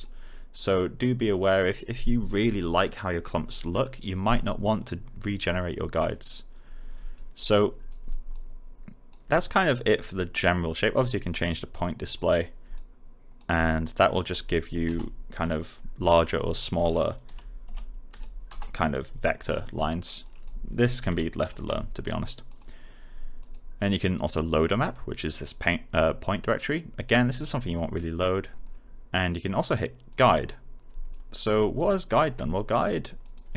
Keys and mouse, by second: 7.1 alt+middle click, 7.8 alt+right click, 8.2 alt+click, 14.8 Return, 16.3 click, 17.2-18.5 typing, 20.2 click, 21.0 typing, 21.5 Return, 22.4 click, 30.0 click, 31.0 alt+middle click, 31.7-33.5 alt+drag.